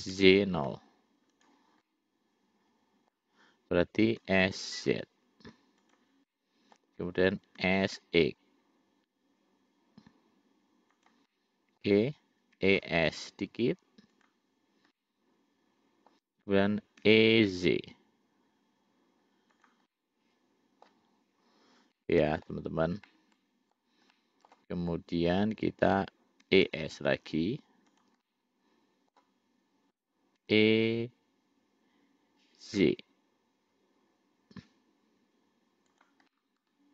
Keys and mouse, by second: 0.0 s, 2.1-3.4 middle drag, 4.4 s, 6.5 middle click, 7.8 s, 11.6 middle click, 12.9 e, 15.2-16.4 middle drag, 17.3 e, 20.1-21.1 middle drag, 22.1 middle click, 23.3 middle click, 24.4 middle click, 26.7 e, 28.5 middle click, 30.7 e, 36.5 middle click.